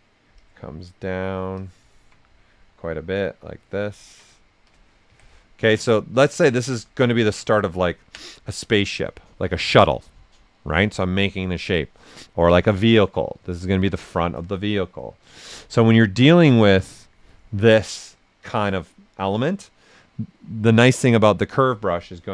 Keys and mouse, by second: 0.3 click, 1.5 alt+click, 2.3-4.0 drag, 4.5 shift+f, 5.0 q, 5.3 right click, 7.5 ctrl+right click, 11.8 right click, 16.3 click, 17.5 right click, 22.2 right click.